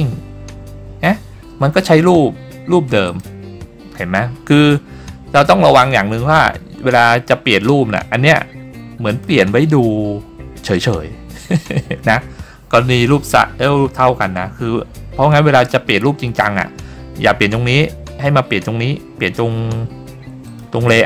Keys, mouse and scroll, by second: 3.2 click, 9.2-20.6 drag.